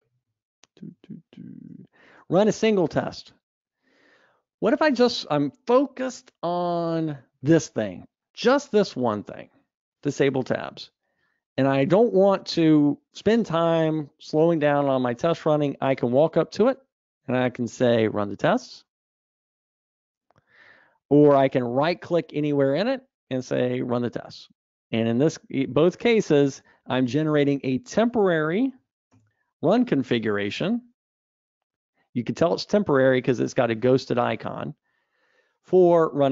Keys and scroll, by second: 1.0 super+Up, 23.8 ctrl+shift+r, 29.3 ctrl+alt+r.